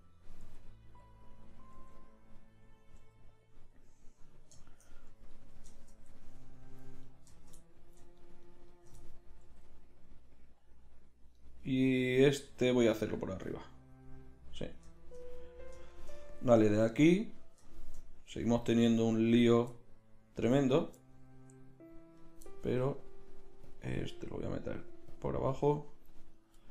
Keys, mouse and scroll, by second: 0.4 g, 1.8 g, 3.0 g, 7.0 right click, 7.7-9.0 middle drag, 9.0 middle click, 9.4 g, 11.8 middle click, 12.4 g, 22.7 g, 24.1 g.